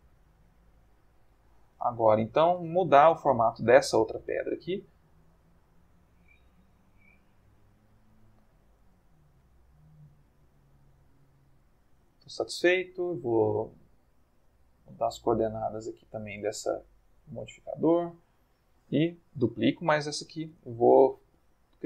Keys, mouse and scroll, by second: 0.0-0.4 scroll up 1, 0.7 scroll down 1, 1.5 click, 2.1 click, 2.5 g, 3.0 click, 3.7 click, 3.9 g, 4.7 click, 5.3 click, 5.4 g, 6.0 click, 6.4 click, 6.4 g, 6.9 click, 7.2 middle click, 8.2 shift+middle click, 9.3 click, 9.5 g, 9.9 click, 10.4 click, 10.4 g, 10.9 click, 11.4 middle click, 11.9 Tab, 14.5-18.4 drag, 19.5 shift+d, 20.2 shift+click, 20.5 Tab, 21.1 click, 21.3 g.